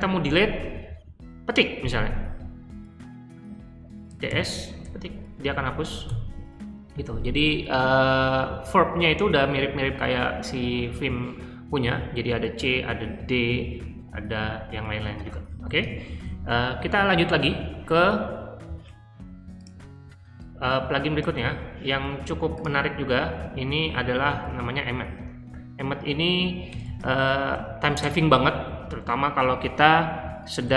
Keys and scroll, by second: 3.8-4.8 typing, 6.0 u, 15.2-16.7 typing, 21.3 super+c, 24.2 super+v, 26.6-27.5 typing, 30.2-30.7 typing.